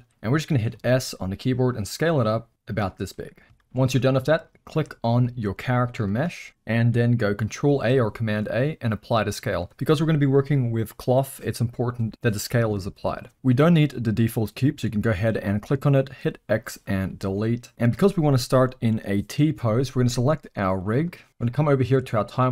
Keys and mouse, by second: 0.7 s, 3.1-3.4 middle drag, 3.6 shift+middle drag, 6.1 g, 7.7 ctrl+a, 16.1 x, 20.7 click.